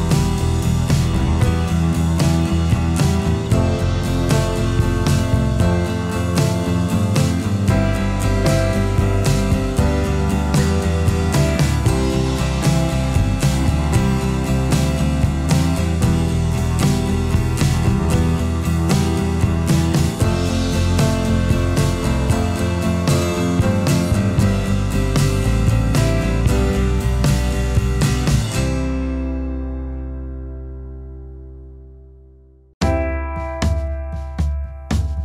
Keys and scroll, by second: 12.1 ctrl+l, 14.3 ctrl+l.